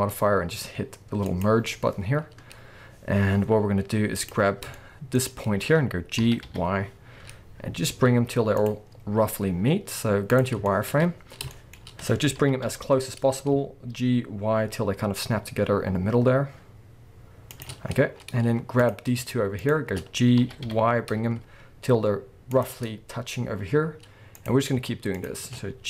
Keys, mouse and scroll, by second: 1.3 click, 2.2 scroll down 1, 2.5-3.5 scroll up 1, 4.1 click, 4.8-5.2 shift+middle drag, 5.2-6.2 scroll up 1, 6.2 g, 8.7 click, 8.9 scroll up 1, 9.2 z, 10.7-17.6 shift+middle drag, 10.9-11.4 scroll up 1, 11.4-12.4 shift+scroll up 2, 12.4 g, 17.6 shift+click, 17.8 scroll down 1, 18.8 click, 19.6 shift+click, 20.4 g, 22.6 shift+click, 22.8-23.7 scroll up 1, 23.7-24.3 scroll down 1, 24.3 click, 25.1 shift+click.